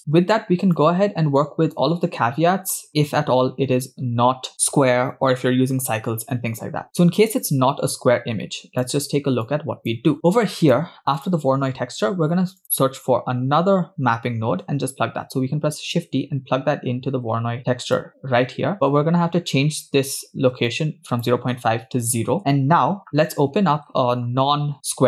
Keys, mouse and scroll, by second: 0.0 middle click, 0.0 scroll down 7, 0.8-1.8 drag, 3.7-4.2 scroll up 3, 4.4 scroll down 2, 7.5-7.9 scroll down 2, 7.9-8.8 drag, 9.4-9.9 drag, 10.3 middle click, 10.3 scroll up 3, 10.6 click, 11.2 click, 12.7 click, 15.6 shift+d, 18.7 middle click, 18.7 scroll up 3, 20.7-22.4 shift+drag, 23.7-24.7 scroll down 2.